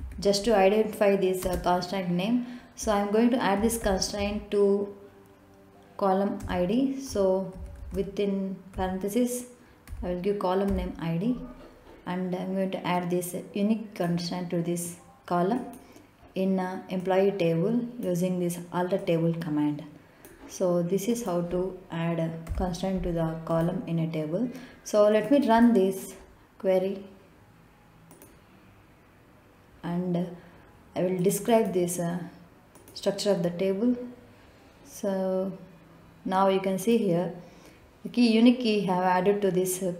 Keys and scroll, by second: 0.0-0.9 typing, 2.2 space, 4.1-5.5 typing, 7.2 Return, 8.1-9.1 typing, 9.6 Left, 10.7 i, 11.5 d, 23.3 ;.